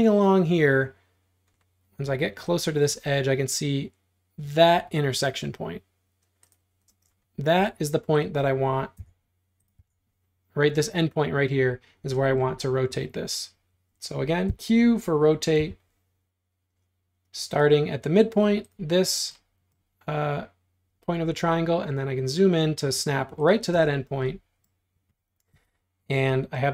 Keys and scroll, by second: 6.9 space, 9.0 BackSpace, 9.8 BackSpace, 14.5 q, 15.6 Tab, 23.8 space, 25.6 q.